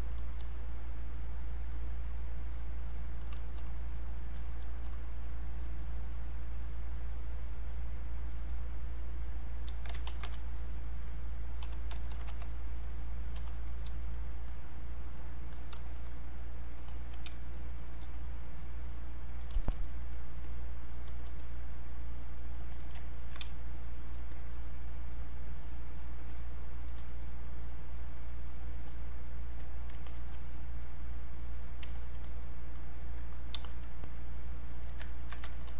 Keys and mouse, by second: 0.0 click, 0.7 click, 4.0 click, 10.1 ctrl+1, 10.4-12.2 drag, 12.2 ctrl+1, 12.4-14.5 drag, 16.4 click, 16.9 alt+click, 17.3 space, 17.8 click, 17.8 space, 18.2 click, 19.8 alt+click, 21.4-22.7 drag, 22.7 alt+click, 23.0 ctrl+right click, 23.4 space, 24.3-27.7 drag, 27.7 click, 33.3 click, 35.1 ctrl+right click, 35.4 click.